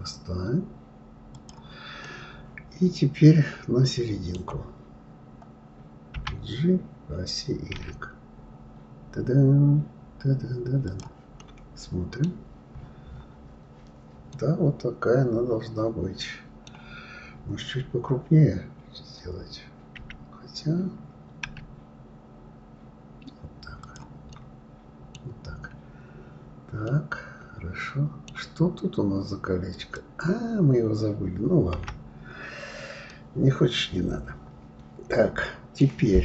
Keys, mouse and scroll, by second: 2.0-5.0 middle drag, 11.4-12.3 middle drag, 12.3-14.3 scroll down 11, 14.3-17.0 middle drag, 17.0 scroll up 3, 17.8-18.9 scroll up 4, 18.9-20.0 scroll up 1, 20.0 d, 24.3-25.4 middle drag, 25.4-25.7 scroll down 3, 26.9-29.7 middle drag, 29.7 click, 31.7 Delete, 33.1-36.1 middle drag.